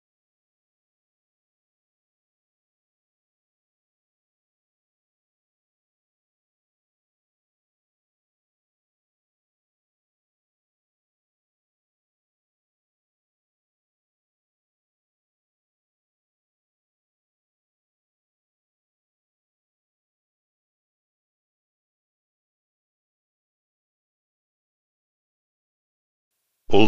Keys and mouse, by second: 0.2 middle click, 0.4 click, 0.7 middle click, 0.9 click, 1.7 middle click, 2.7 click, 2.9 middle click, 3.0 click, 3.2 middle click, 3.3 click, 3.6 middle click, 3.7 click, 4.0 middle click, 4.1 click, 4.2 middle click, 4.3 click, 4.8 middle click, 4.9 click, 5.1 middle click, 5.4 click, 6.0 middle click, 6.1 click, 6.4 middle click, 6.6 click, 6.9 middle click, 7.0 click, 7.3 middle click, 7.4 click, 7.7 middle click, 7.8 click, 8.0 middle click, 8.2 click, 9.1 click, 9.3 middle click, 9.4 click, 9.9 middle click, 10.0 click, 10.7 middle click, 10.8 click, 11.4 middle click, 12.1 alt+middle click, 12.9 click, 13.2 middle click, 13.5 click, 14.0 middle click, 14.1 click, 14.4 middle click, 14.7 click, 15.4 click, 15.6 middle click, 15.7 click, 16.1 middle click, 16.3 click, 16.7 middle click, 16.8 click, 17.2 middle click, 17.3 click, 17.6 middle click, 17.9 click, 18.3 middle click, 18.7 click, 19.7 middle click, 20.8 click, 21.5 middle click, 21.7 click, 22.3 middle click, 22.4 click, 22.8 middle click, 23.0 click, 23.3 middle click, 23.4 click, 23.6 middle click, 23.7 click, 24.0 middle click, 24.1 click, 24.5 middle click.